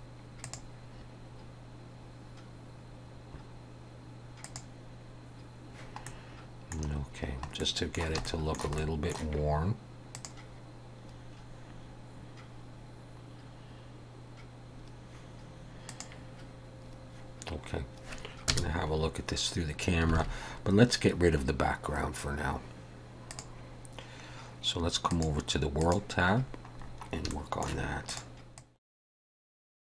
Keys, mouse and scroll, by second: 0.5 click, 3.5 scroll down 2, 4.5 click, 6.1 middle click, 7.1-7.4 scroll down 3, 7.6 middle click, 8.3 shift+middle click, 8.8 middle click, 10.2 click, 14.4 scroll down 1, 16.4 click, 18.6 KP_0, 20.2 alt+a.